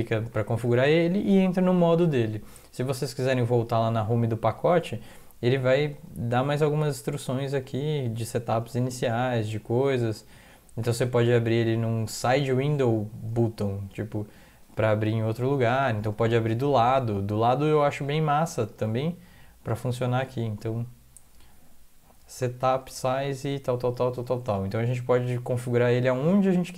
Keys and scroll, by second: 0.2 Down, 2.4 alt+Tab, 2.9 alt+Tab.